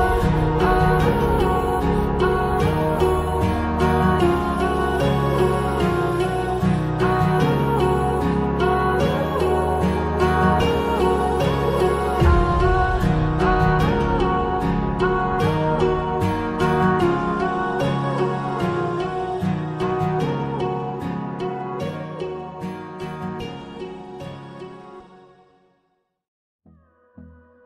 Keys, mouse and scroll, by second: 3.6 click, 7.6-8.0 scroll down 1, 8.1 click, 10.1 scroll up 1, 10.5 click, 12.1 scroll down 1, 13.8 Down, 15.6-16.5 scroll up 1, 16.5 click, 17.7-18.1 scroll down 1, 18.1 scroll up 1, 19.5 click, 24.8 click, 27.5 click.